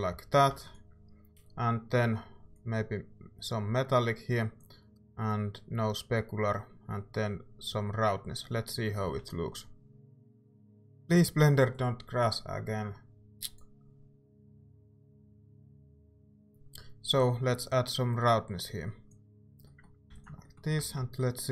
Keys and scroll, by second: 0.5 ctrl+s, 9.0 z, 16.2 ctrl+s, 16.2 z, 20.1 ctrl+s, 20.8 z.